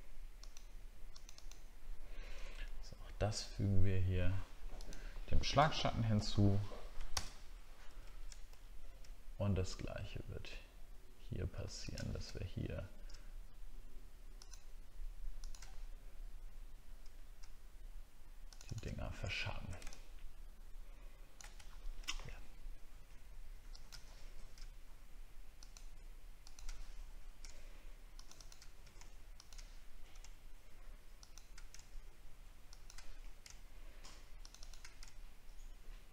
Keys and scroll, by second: 7.2 ctrl+BackSpace, 7.8 ctrl+d, 8.5 alt+scroll up 1, 19.3 alt+scroll down 1, 22.2 alt+scroll up 1.